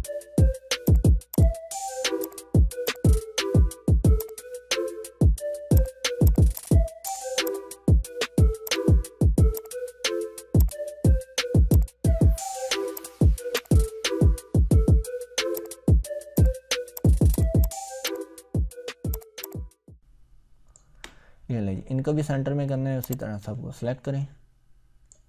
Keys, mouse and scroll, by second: 0.9 click, 2.8-4.1 drag, 8.6 click, 9.5-10.2 ctrl+shift+click, 10.6-11.4 drag, 15.7-16.2 click, 16.8 Delete, 17.0 click, 17.1 Delete, 17.3 click, 18.2-19.0 ctrl+click, 19.6-21.0 ctrl+drag, 21.5 scroll up 2, 23.2-25.2 drag.